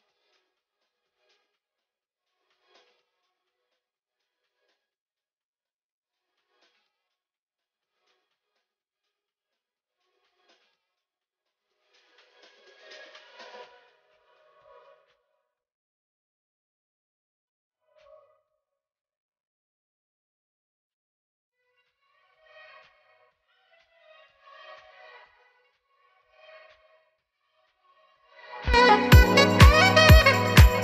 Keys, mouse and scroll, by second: 2.4 click, 6.7 scroll down 1, 7.7 click, 12.8 click, 20.0 s, 21.2 click, 24.8 scroll up 1, 25.8 click, 30.0 click.